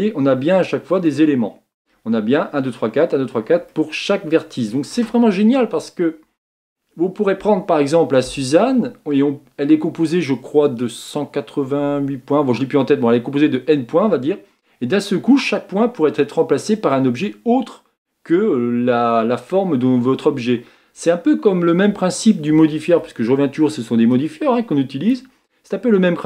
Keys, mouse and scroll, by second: 24.2-26.2 drag.